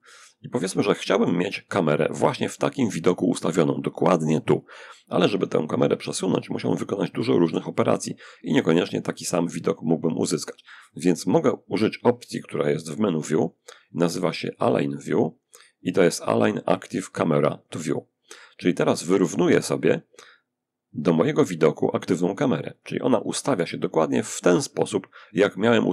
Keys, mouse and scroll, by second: 5.0 g, 5.9 click, 6.3 r, 6.6 r, 7.5 [, 10.1 click, 11.9 click, 22.0 click.